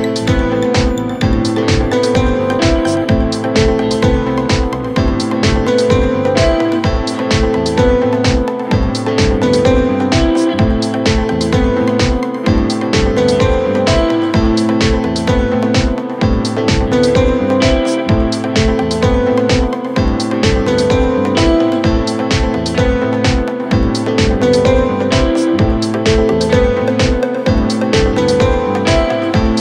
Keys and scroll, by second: 2.8 m, 3.0 t, 3.2 l, 3.3 Return, 5.2 3, 6.2 ], 8.4 h, 8.6 a, 8.7 d, 8.8 Return, 9.2 4, 11.4 3, 11.7 ], 13.0 4, 16.4 ctrl+z, 25.8 3.